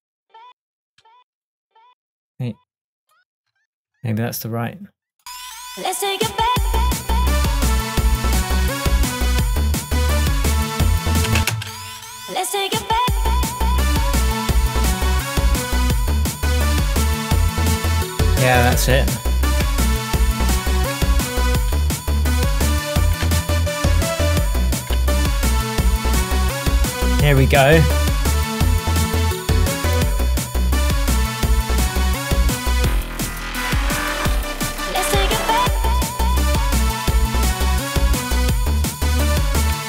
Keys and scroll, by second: 0.0 Tab, 4.0 Tab, 11.4 space, 19.8 Tab, 25.2 super+v.